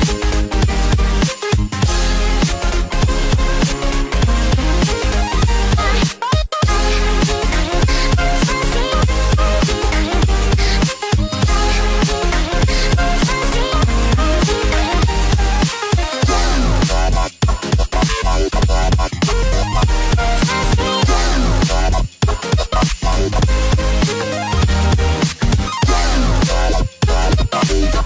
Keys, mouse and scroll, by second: 0.8 click, 2.6 click, 3.2 click, 4.6 middle click, 5.9 middle click, 6.0 click, 9.1 click, 10.2 alt+click, 11.6 alt+click, 14.8 click, 15.9 click, 17.2 click, 17.4 scroll down 3, 17.7 middle click, 21.2 KP_3, 22.9 scroll up 2, 24.3 scroll up 1, 24.4 click.